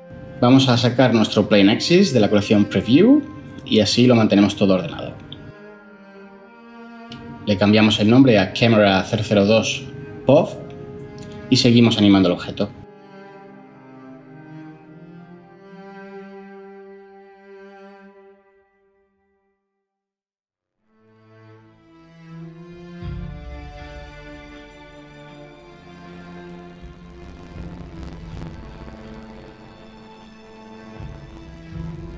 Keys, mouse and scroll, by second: 8.1 ctrl+c, 9.4 ctrl+v, 11.8-12.4 typing.